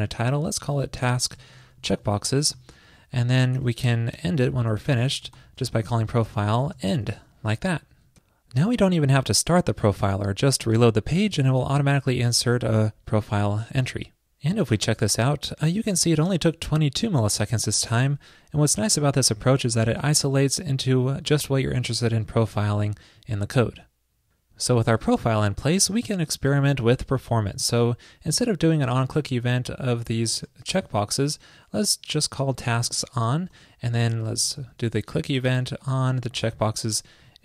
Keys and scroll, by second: 29.3 super+x, 29.9 alt+Right, 30.5 alt+shift+Right, 36.0 super+v.